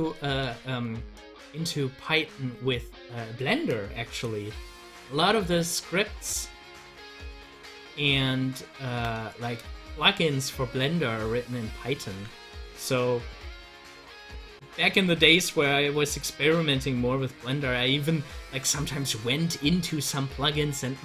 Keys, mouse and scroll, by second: 2.6 ctrl+z, 6.1-12.1 drag, 12.1 ctrl+z, 12.8-15.0 drag, 15.0 ctrl+z.